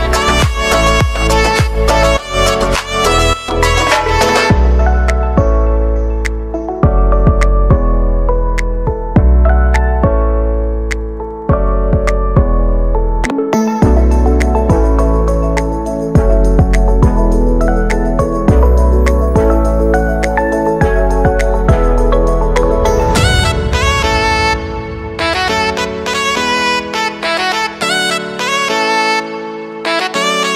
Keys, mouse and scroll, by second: 0.5 [, 1.9 click, 4.8-8.4 typing, 10.2-10.9 typing, 11.7 Return, 12.6 click, 14.2 ctrl+d, 15.2-15.6 scroll down 1, 15.8 ctrl+d, 17.0-17.5 scroll down 1, 17.7 ctrl+d, 20.9 click, 22.1 space, 25.3 click, 27.0 ctrl+d, 30.1-30.5 drag.